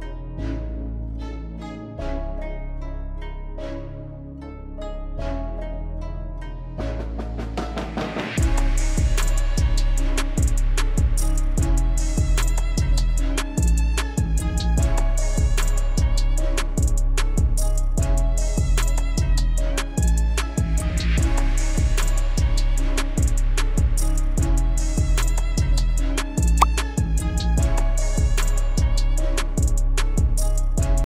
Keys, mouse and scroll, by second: 5.2-10.3 alt+drag, 10.3 alt+click, 10.9 click, 11.2 alt+click, 11.9-12.4 typing, 12.7-14.0 drag, 14.0 click, 15.2 alt+click, 15.6-19.1 alt+drag, 19.1 click, 21.3-23.7 alt+scroll down 2, 23.7 scroll down 1, 24.3-24.7 scroll up 2.